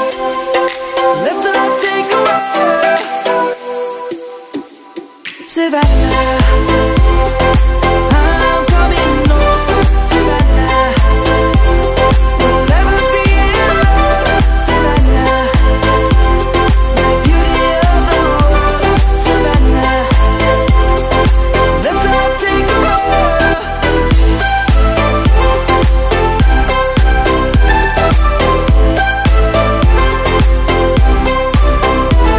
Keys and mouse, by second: 3.2 shift+middle click, 5.9 middle click, 7.9 click, 17.3 click, 18.7 middle click, 19.6 click, 20.6 Tab, 21.2 middle click, 24.1 click, 26.1 middle click, 26.9 click, 27.8 middle click, 28.8 1.